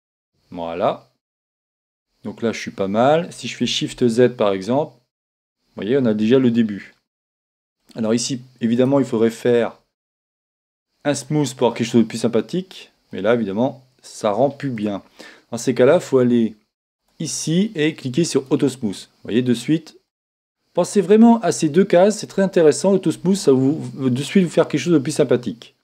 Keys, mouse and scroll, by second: 0.0-4.4 drag, 4.4 shift+z, 5.1-8.8 middle drag, 8.8 click, 8.8-10.5 right drag, 11.2-12.9 drag, 12.7-15.0 middle drag, 17.0-22.0 drag, 23.5-25.4 middle drag.